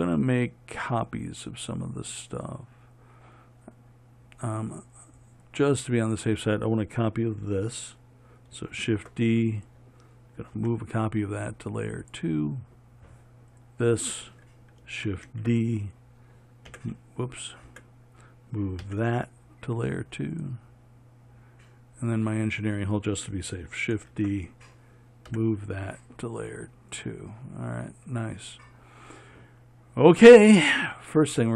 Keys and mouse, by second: 9.1 shift+d, 10.9 m, 13.8 click, 15.6 shift+d, 17.0 n, 18.0 n, 19.1 m, 22.6-24.2 drag, 24.2 shift+d, 25.6 m.